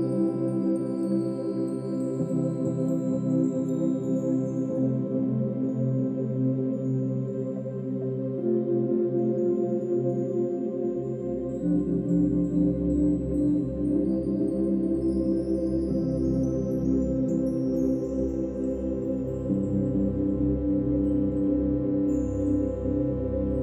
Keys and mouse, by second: 0.1 ctrl+click, 0.1 typing, 1.1 shift+click, 1.7 shift+click, 2.5 shift+click, 3.3-6.6 shift+drag, 3.3 typing, 7.0 typing, 7.7 ctrl+alt+click, 8.9 alt+shift+click, 9.4 click, 11.2-11.6 typing, 14.1-15.5 shift+drag, 15.9-16.3 typing, 18.3-18.9 shift+drag, 19.0-20.7 drag, 20.7-21.1 typing.